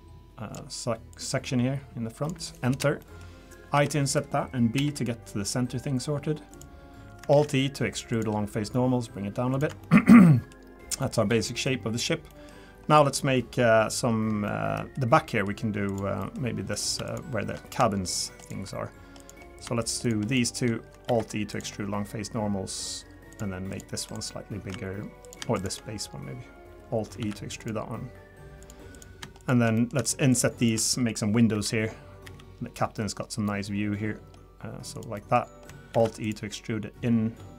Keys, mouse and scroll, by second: 3.0 middle click, 3.7 i, 6.8-7.2 scroll up 2, 7.3 alt+e, 9.8 shift+middle click, 10.2 middle click, 10.7-11.3 scroll down 2, 11.0 middle click, 11.3 3, 11.5 middle click, 11.8-12.3 scroll up 2, 12.3 middle click, 12.9 click, 13.1 scroll down 2, 13.6 scroll up 2, 14.2 scroll down 1, 14.5 middle click, 15.3 middle click, 15.9 click, 16.2 middle click, 16.7 click, 17.0 shift+click, 19.2 click, 19.8 shift+click, 21.0 alt+e, 23.7 click, 25.2 click, 25.6 shift+click, 27.2 alt+e, 28.9 click, 29.4 shift+click, 29.7 middle click, 30.3 shift+click, 30.8 middle click, 31.5 i, 35.1 middle click, 35.9 alt+e.